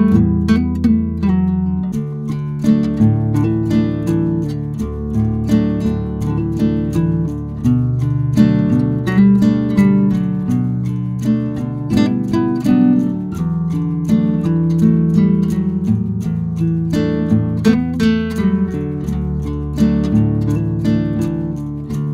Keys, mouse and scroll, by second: 1.1 click, 2.0 click, 2.7 g, 4.4 click, 4.8 g, 6.4 click, 7.1 Delete, 7.6 a, 7.7 f, 8.0 ctrl+2, 8.3 \, 8.8 shift+z, 9.2 ctrl+2, 9.5 click, 9.8 Tab, 10.1 ctrl+2, 10.4-13.9 typing, 13.8 ctrl+z, 14.9-15.2 scroll up 3, 15.2 s, 16.4 scroll up 2, 16.5 s, 21.8 g.